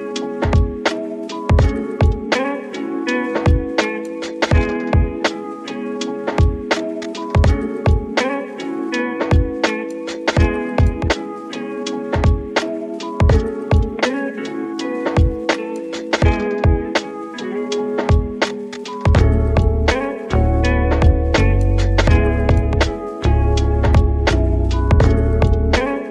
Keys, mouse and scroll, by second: 0.8 click, 1.7 click, 8.1-10.2 middle drag, 10.2 click, 10.7 middle click, 11.3-12.4 drag, 25.5-26.1 scroll down 5.